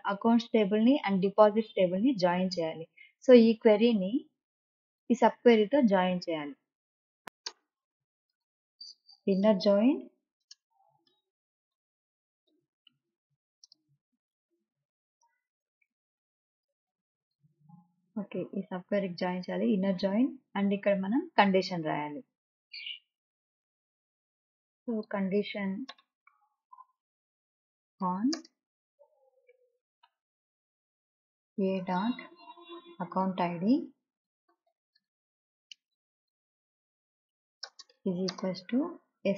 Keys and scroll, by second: 7.2 BackSpace, 8.1 Return, 9.5-13.1 typing, 14.3 Return, 15.9 BackSpace, 27.9 space, 29.1 n, 29.3 space, 31.6 Return, 32.4 a, 32.9 ., 33.9 a, 34.2 c, 35.5-37.4 typing, 38.5 d, 38.6 space.